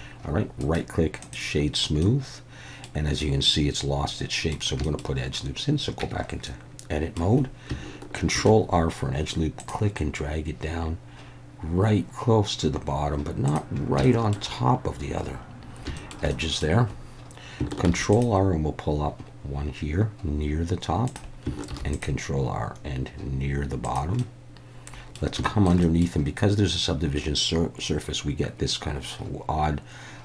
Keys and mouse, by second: 0.7 right click, 2.0-2.8 middle drag, 3.5-4.5 middle drag, 4.8 shift+middle click, 6.0 Tab, 6.5 middle click, 8.3 ctrl+r, 13.4 click, 14.1 shift+middle click, 16.0 shift+middle click, 16.4 middle click, 17.9 ctrl+r, 21.7 ctrl+r, 23.8 click, 24.2-25.2 middle drag, 25.5 shift+middle click, 25.9 middle click.